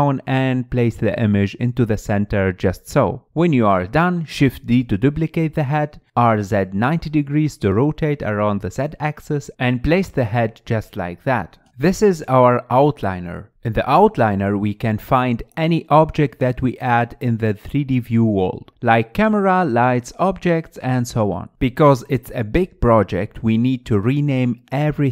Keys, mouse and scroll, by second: 0.0-1.4 typing, 0.7 shift+middle click, 3.3 scroll down 8, 3.5 middle click, 4.1 click, 4.6 shift+middle click, 4.7 shift+d, 5.7 click, 6.4 r, 7.3 KP_3, 7.5 scroll up 7, 7.7 shift+middle click, 8.6 click, 10.0 click, 11.5 scroll down 8, 11.6 middle drag, 11.9 middle click, 12.1 click, 12.2-14.9 middle drag, 21.8-25.1 drag.